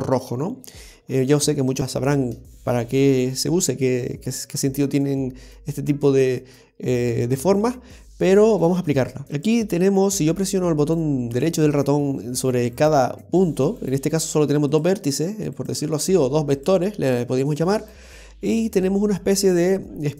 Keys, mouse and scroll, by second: 9.4 right click, 10.8 right click, 13.8 right click, 14.7 right click, 16.6 right click, 17.8 right click.